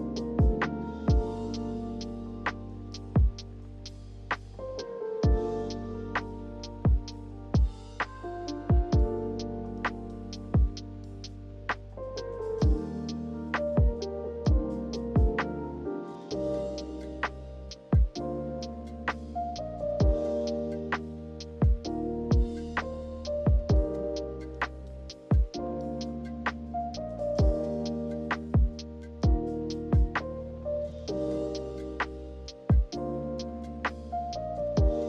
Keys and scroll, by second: 0.0 v, 5.1 Delete, 12.0 Delete, 14.9 Delete.